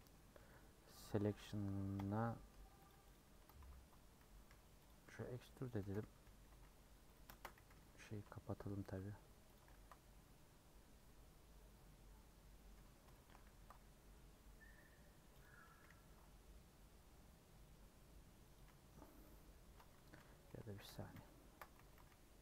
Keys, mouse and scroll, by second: 1.0 p, 1.9 o, 2.5 Tab, 2.9 click, 3.1 click, 3.4 Tab, 3.6 a, 4.3 e, 5.0 s, 5.8 g, 7.3 shift+Tab, 7.6 g, 9.7 ctrl+b, 12.7 scroll up 1, 13.1 middle click, 13.5 ctrl+b, 15.3 click, 15.7 g, 18.8 scroll down 1, 19.2 middle click, 19.8 scroll up 1, 19.9 ctrl+z, 20.1 ctrl+z, 20.4 ctrl+z, 20.8 ctrl+z, 21.1 ctrl+z, 21.8 g.